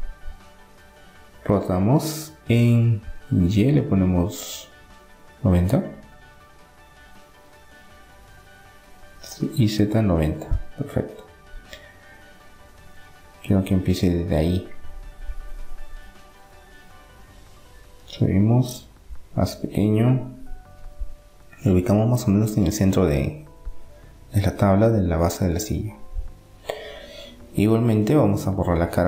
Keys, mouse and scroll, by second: 3.4-5.2 drag, 7.6-9.2 drag, 10.8-17.0 middle drag, 17.4 middle click, 17.8-19.1 drag, 19.1 s, 22.7-25.1 middle drag, 25.1 Tab, 26.0 middle click, 26.3-28.1 drag, 27.0-28.9 right drag, 28.4 Delete, 28.8 middle click, 28.9 click.